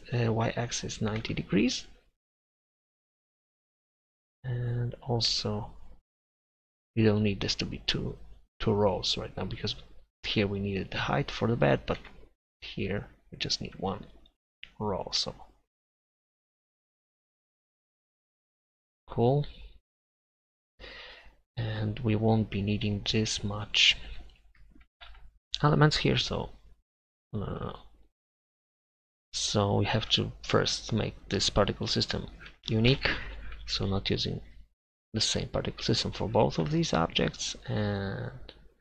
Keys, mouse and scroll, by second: 4.0-5.1 drag, 7.7-10.5 drag, 10.5-12.0 middle drag, 12.0 Tab, 12.9-15.1 right drag, 17.5 Delete, 18.8 Tab, 24.5-28.5 middle drag, 28.5 click, 29.3-33.3 middle drag.